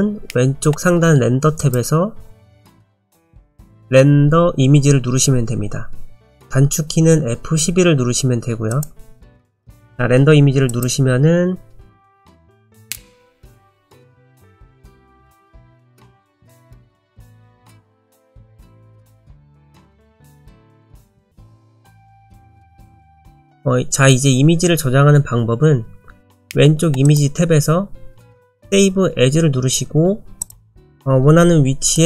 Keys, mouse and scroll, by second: 1.6 click, 8.7 click.